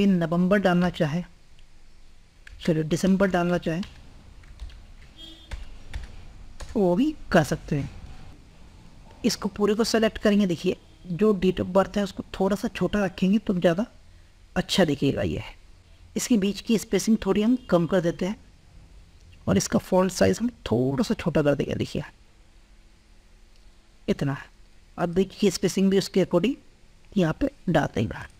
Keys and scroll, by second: 4.3 ctrl+Left, 7.3 ctrl+Left.